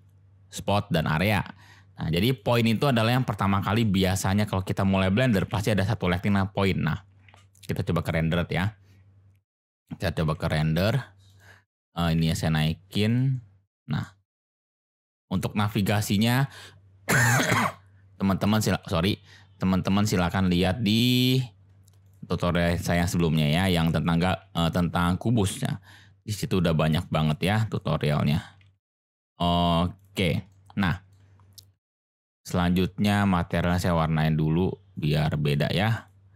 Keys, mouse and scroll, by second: 3.8 click, 5.4 g, 6.2 click, 6.2 z, 7.2 z, 10.1 g, 10.2 z, 11.3 click, 11.8 click, 12.2 g, 12.3 z, 13.0 click, 13.3-14.3 drag, 14.4 g, 14.4 z, 14.8 click, 15.6 g, 15.7 z, 16.2 click, 18.6 shift+a, 20.7 s, 22.1 drag, 22.7-23.5 middle drag, 23.9 click, 24.4 f, 25.5 g, 27.2 click, 27.8-28.3 drag, 28.6 z, 30.0 click, 30.5 click, 30.7-31.1 middle drag, 32.4 click, 35.9 click.